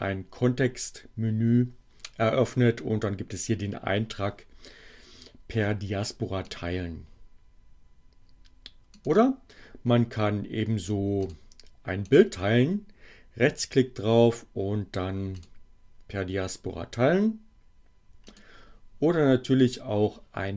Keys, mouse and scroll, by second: 6.5 click, 8.9 click, 11.1 click, 12.0 right click, 15.3 click, 18.3 click, 19.6 click.